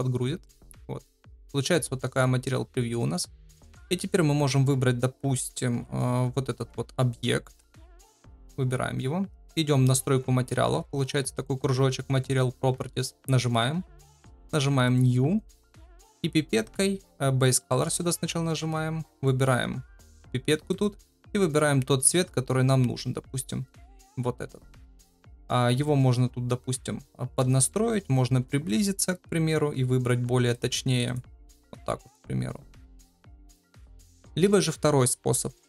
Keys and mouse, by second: 0.4-2.2 middle drag, 3.6 shift+middle click, 7.6 middle drag, 8.2-8.7 shift+middle drag, 12.8 click, 14.8-17.1 drag, 25.0 shift+middle drag, 27.6 shift+middle drag, 28.4 shift+middle drag, 32.9 shift+middle click, 33.4 shift+middle drag, 34.2 shift+middle drag.